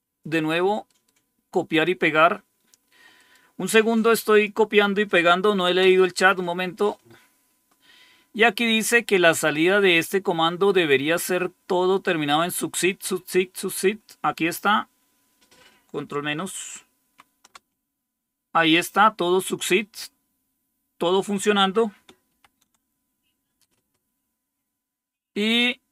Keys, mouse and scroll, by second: 0.8 right click, 1.6 click, 3.0 right click, 4.1 click, 5.7 Return, 16.9 ctrl+-, 22.2 ctrl++, 24.6 scroll down 1.